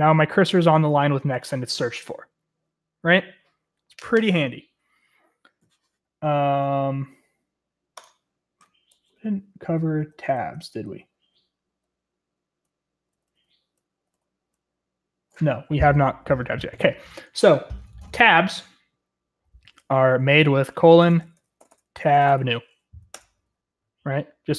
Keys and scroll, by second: 9.1-14.8 typing, 20.7-23.1 typing.